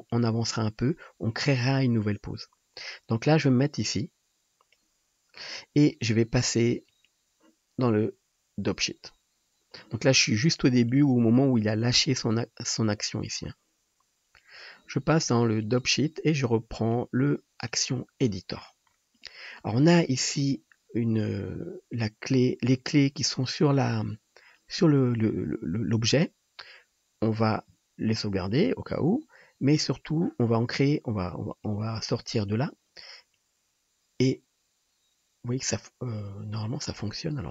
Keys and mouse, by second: 6.7 middle click, 9.8-12.9 drag, 9.8-12.9 middle drag, 9.8-12.9 right drag, 28.7-31.5 drag, 37.0-37.5 middle drag.